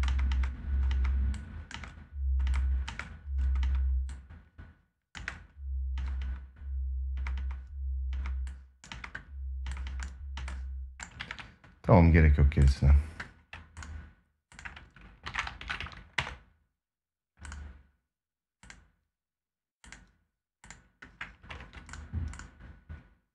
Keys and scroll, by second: 4.9 space, 10.9 ctrl+s, 21.2 ctrl+s.